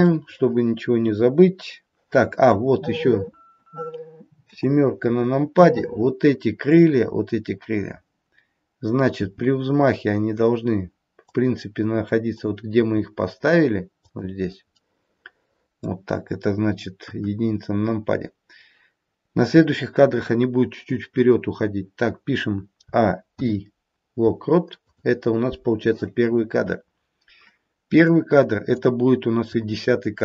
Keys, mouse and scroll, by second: 0.0 middle click, 2.2 middle click, 4.3 KP_7, 6.7 click, 9.1 g, 13.0 click, 13.1 g, 14.6 middle click, 15.6 middle click, 17.0 KP_1, 22.8 a, 23.2 i, 28.0 click.